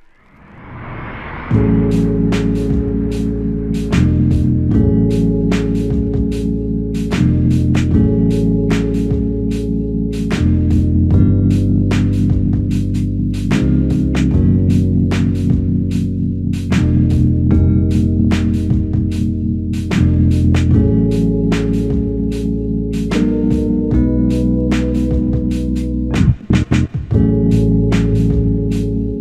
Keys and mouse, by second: 0.4 double click, 2.7 alt+click, 4.1 double click, 5.0 alt+click, 6.2 double click, 6.8 alt+click, 7.8 double click, 9.0 alt+click, 9.9 f, 11.2 double click, 12.8 alt+click, 13.8 double click, 16.5 alt+click, 18.2 f, 20.3 alt+click, 21.7 alt+click, 25.0 double click, 25.7 alt+click, 26.8 double click, 28.1 alt+click.